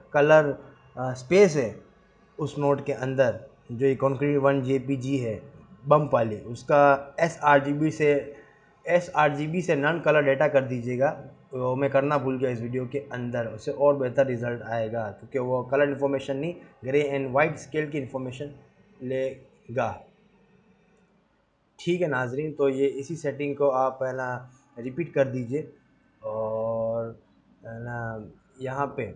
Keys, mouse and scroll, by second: 27.0 click, 27.4 click, 27.8 scroll down 5, 28.9 scroll up 4.